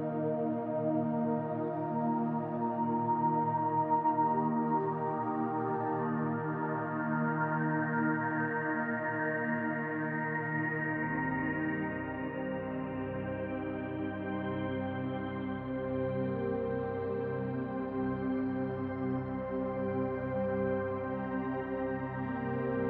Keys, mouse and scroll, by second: 0.0 ctrl+z, 2.0-2.4 scroll up 1, 2.4-6.4 drag, 6.1 ctrl+z, 6.4-10.2 middle drag, 6.8 scroll down 2, 8.0-8.3 scroll down 2, 8.8-9.6 scroll up 2, 9.6-10.2 scroll up 1, 10.2 click, 10.6 scroll up 1, 10.9-22.8 middle drag.